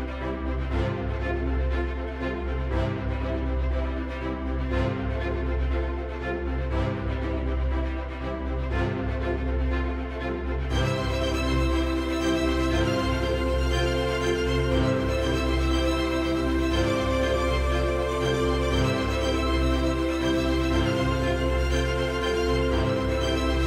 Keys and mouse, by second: 0.2 shift+click, 1.4 shift+click, 2.8 shift+click, 3.9 shift+click, 4.7-6.9 shift+drag, 7.2-8.1 middle drag, 8.8 shift+click, 19.3 right click, 23.5-23.6 middle drag.